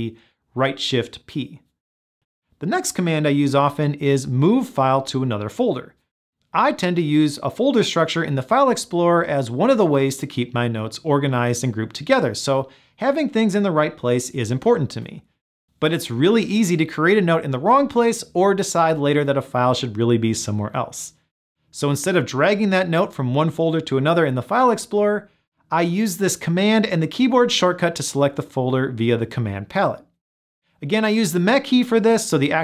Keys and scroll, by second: 29.3 ctrl+alt+shift+m.